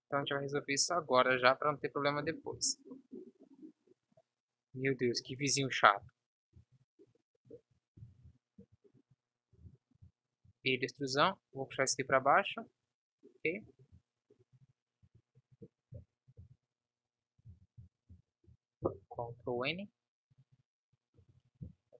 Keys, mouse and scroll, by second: 1.9 KP_5, 2.6 shift+f, 5.5 Tab, 6.3 Tab, 6.7 Tab, 8.1 ctrl+l, 10.5 e, 12.3 s, 13.9 ctrl+s, 15.2 a, 16.1 z, 16.5 z, 17.6 a, 18.0 a, 18.3 a, 19.0 ctrl+n, 19.5 Tab.